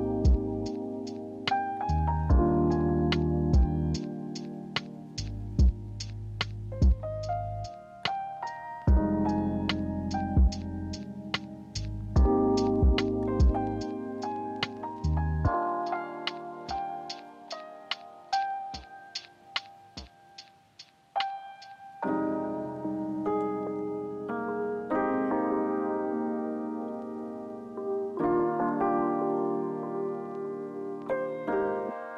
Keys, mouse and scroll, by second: 6.6 middle click, 6.6 alt+scroll, 13.6 ctrl+c, 13.9 ctrl+f, 15.3 alt+scroll up 3, 17.3-17.7 alt+scroll down 1, 17.7 alt+scroll up 2, 22.0 alt+scroll, 27.6 ctrl+g.